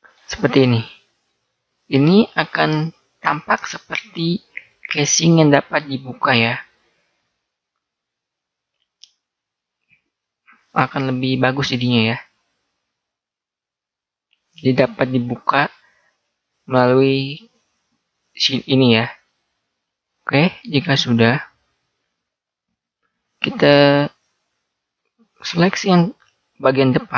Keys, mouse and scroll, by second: 0.5 a, 1.2-2.7 middle drag, 2.8 middle click, 16.2-18.7 middle drag, 19.2-22.5 middle drag, 23.3-26.0 middle drag.